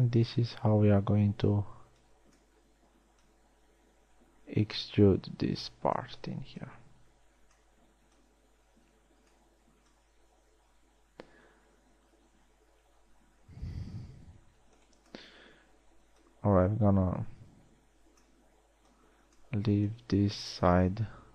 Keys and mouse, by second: 1.4 b, 12.3-12.8 middle drag, 16.8-17.4 drag.